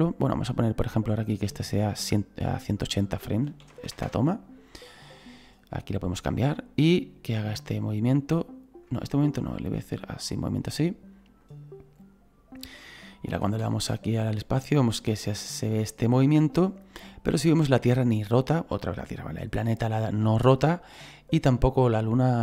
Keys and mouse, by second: 2.6 click, 3.5 KP_1, 3.7 KP_8, 3.7 KP_0, 3.9 Return, 6.8 middle click, 9.7 shift+middle click, 11.4 click, 13.6 space.